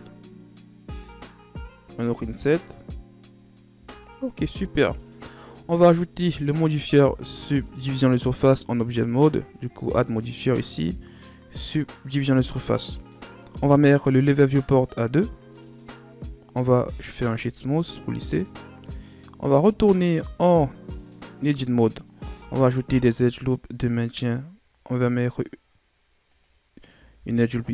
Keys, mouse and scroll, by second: 0.8 i, 3.7 Tab, 4.1 scroll down 1, 4.7-5.5 scroll down 3, 5.5 middle click, 6.0 Tab, 6.5 scroll down 1, 6.6 middle click, 7.1 Tab, 8.9-11.9 drag, 13.1-16.5 drag, 16.5 w, 18.8-19.4 scroll up 1, 19.4 Tab, 22.2 ctrl+r, 27.1 ctrl+r.